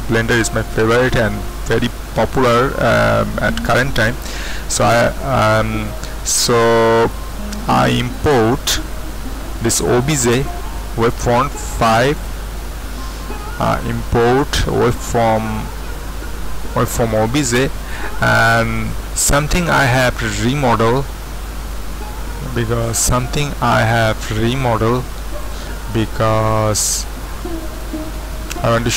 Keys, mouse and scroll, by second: 12.3-24.2 middle drag, 26.4-28.9 middle drag.